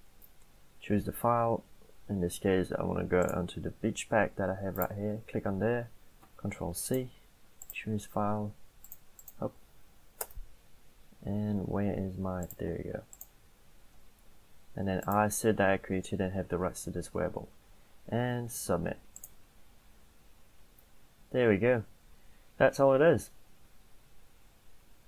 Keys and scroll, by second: 6.3 ctrl+c, 9.7 ctrl+v, 10.3 Return.